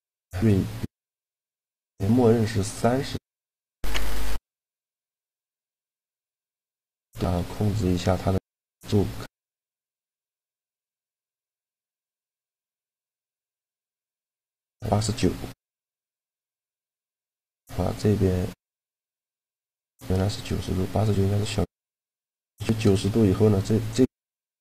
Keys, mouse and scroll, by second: 0.7-4.0 middle drag, 6.6-8.5 middle drag, 8.3-9.9 drag, 15.0-16.8 middle drag, 20.4-23.8 middle drag, 24.4-24.6 middle drag.